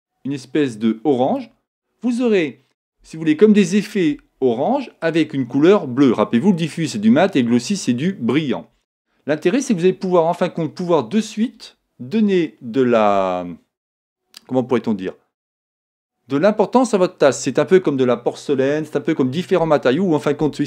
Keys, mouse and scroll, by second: 9.6-11.4 middle drag.